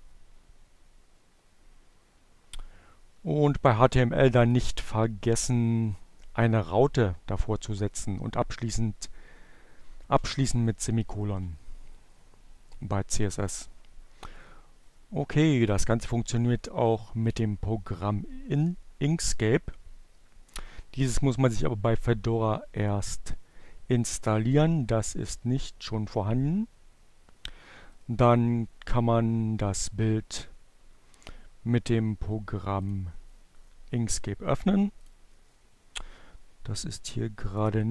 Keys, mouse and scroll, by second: 2.3 click, 9.3 click, 11.5-14.9 drag, 16.7 click, 26.2-27.7 right drag, 31.4-32.7 drag, 34.3 click, 36.9-37.9 drag.